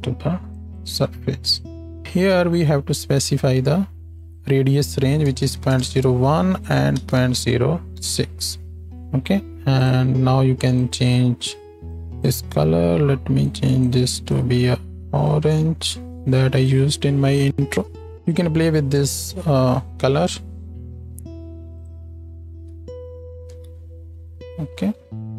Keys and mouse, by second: 10.9-21.8 drag, 22.5-25.3 drag, 22.5 z, 23.6 z.